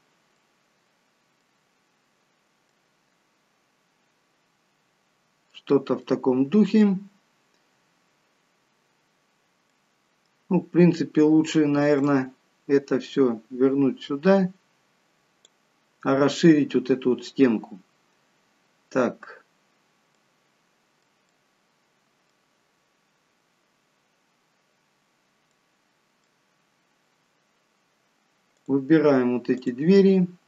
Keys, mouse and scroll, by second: 0.3 middle click, 2.0-2.7 scroll down 1, 2.7 middle click, 2.7-4.9 scroll down 2, 6.0 middle click, 7.1-9.0 scroll up 1, 9.7 middle click, 10.5-12.1 scroll up 1, 12.1 click, 12.1-12.7 scroll up 1, 20.2 middle click, 21.3 middle click, 25.1-25.6 scroll down 1, 25.6 middle click, 28.6 click, 29.5 click.